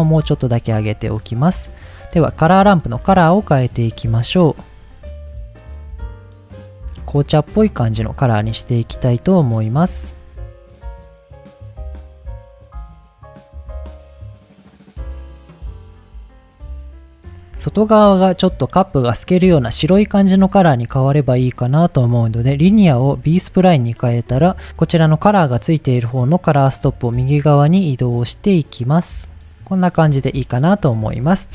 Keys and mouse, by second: 3.4 click, 4.1 click, 11.2-12.0 middle drag, 12.0-13.0 drag, 13.4 ctrl+z, 13.7 drag, 14.2-15.0 drag, 15.4 ctrl+z, 15.7 ctrl+z, 16.2 click, 22.4-23.5 drag, 25.6-29.4 drag, 30.3-30.6 middle drag, 31.3 middle click.